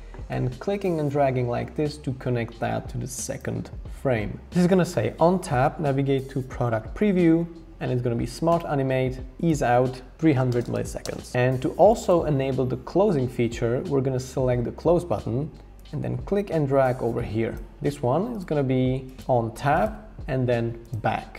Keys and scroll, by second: 10.1-12.2 typing.